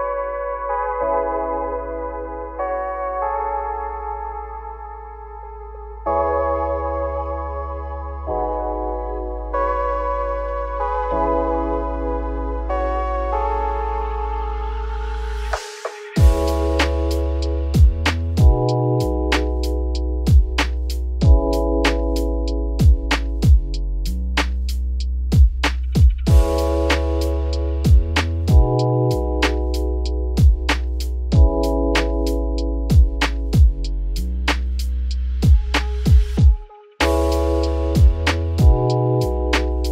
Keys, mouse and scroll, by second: 0.7 scroll down 4, 0.9 middle click, 1.2-1.8 scroll up 5, 1.9 click, 2.1 `, 2.3 scroll down 4, 2.5 middle click, 3.1 `, 3.5 scroll down 2, 3.7 middle click, 4.1 g, 4.8-5.5 scroll down 9, 5.5 middle click, 6.5 click, 6.8-7.6 scroll up 8, 7.6 g, 9.1 scroll down 1, 9.2 middle click, 9.6-10.5 scroll down 14, 10.5-11.4 scroll up 5, 11.4 click, 11.8 `, 12.0 scroll down 1, 12.1 middle click, 12.9 scroll up 3, 13.1 g, 14.2-15.3 scroll down 28, 15.3 middle click, 15.8-16.1 scroll up 5, 16.1 scroll down 1, 16.3 scroll up 1, 16.4 middle click, 16.9 scroll up 2, 17.2 shift+middle click, 17.9 click, 18.2 `, 19.1 click, 19.3 scroll down 1, 19.4-21.7 middle drag, 21.7 `, 22.3 shift+middle click, 22.6-24.3 scroll up 8, 22.7 z, 23.2 shift+middle click, 24.3-24.7 scroll down 8, 24.7-26.8 shift+middle drag, 26.8 scroll down 1, 27.0 middle click, 27.5 z, 27.9-28.6 scroll down 4, 28.6 /, 29.0 middle click, 29.3 scroll up 1, 29.8 scroll down 1, 29.9 middle click, 30.4-30.9 scroll down 10, 30.9 middle click, 31.4 3, 31.5 click, 31.8 shift+middle click, 32.5 click, 33.1 shift+click, 33.3 scroll down 2, 33.4 middle click, 34.2 scroll up 1, 34.5 scroll down 1, 34.5 shift+middle click, 35.1-36.0 scroll down 1, 36.0 shift+click, 37.2 x, 39.3 click.